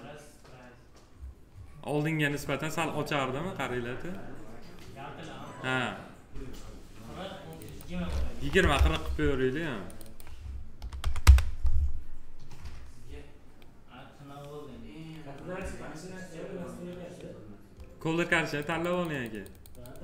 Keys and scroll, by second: 8.3 2, 8.7 Return, 10.7 4, 11.2 Return.